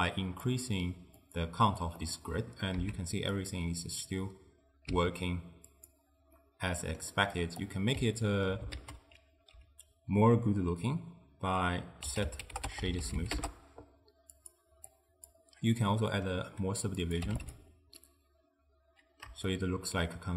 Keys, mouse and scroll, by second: 1.3 click, 2.1-2.9 middle drag, 2.9 z, 4.4 click, 4.9 z, 6.5-7.7 middle drag, 7.7 click, 8.2-8.8 ctrl+middle drag, 8.8 ctrl+a, 14.9 click, 15.8-17.1 middle drag, 17.1 click, 18.1-20.3 middle drag.